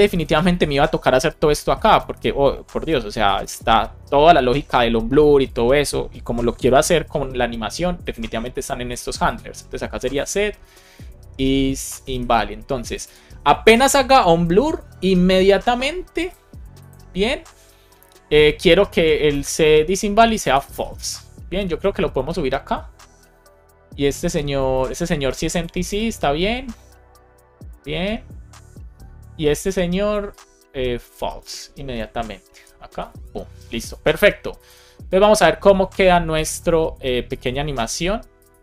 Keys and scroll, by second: 0.4 super+c, 1.1 super+Right, 1.6 Left, 2.8 space, 3.1 super+v, 3.5 super+s, 3.7 super+Right, 3.8 super+Left, 6.5 alt+shift+f, 6.9 super+s, 9.6 Return, 10.6 shift+i, 11.8 Down, 12.2 Return, 13.0 alt+shift+Left, 13.5 super+c, 18.8 Return, 19.2 super+v, 19.6 shift+9, 20.9 super+s, 21.7 alt+Up, 32.5 alt+Up, 33.0 super+s, 37.5 super+r.